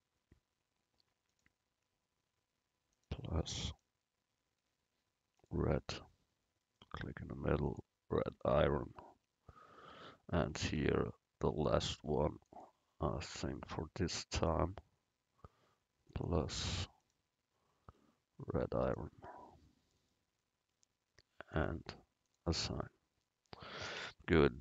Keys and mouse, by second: 1.4-5.5 drag, 7.8-10.1 drag, 7.8 right click, 10.1 Tab, 10.5-14.3 drag, 10.8 Tab, 16.2-24.1 drag, 21.6 right click, 24.1 Tab.